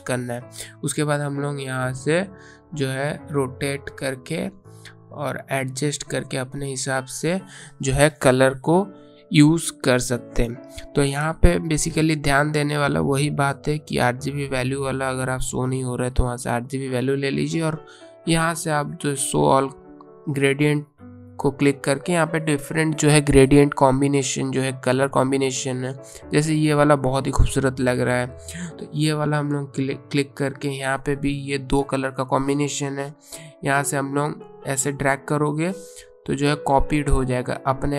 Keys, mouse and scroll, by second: 2.3 click, 14.6 click, 16.4 click, 19.6-20.0 scroll up 1, 20.0-20.3 scroll down 1, 28.9 click, 31.8 click, 37.2 right click.